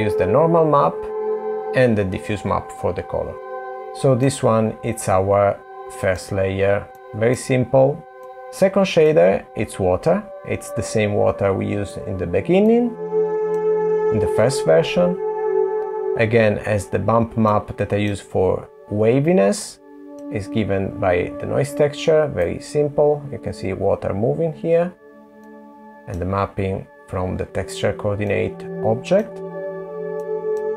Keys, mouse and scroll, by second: 2.7 click, 3.6 middle click, 3.8 middle click, 5.0 middle click, 6.1 middle click, 8.0 click, 9.0 middle click, 12.6 middle click, 17.4 middle click, 19.7 middle click, 20.5 scroll up 2, 22.4 click, 22.4 scroll up 1, 28.2 middle click, 30.2 middle click.